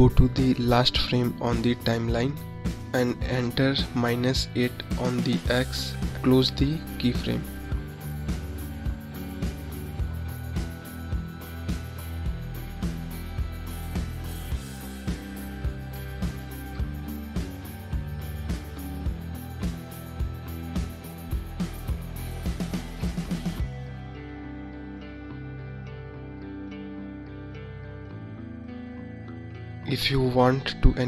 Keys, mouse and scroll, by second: 5.2 click, 7.1-10.8 drag, 10.8-11.4 scroll up 1, 12.5 middle click, 14.2 middle click, 19.8-23.6 drag, 24.1 click, 25.7-29.8 drag.